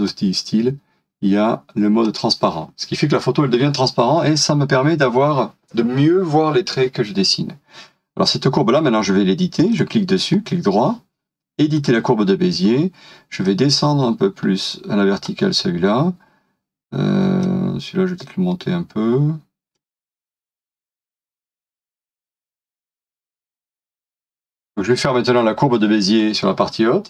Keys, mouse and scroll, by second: 10.3 right click, 23.4 space, 24.4 ctrl+z.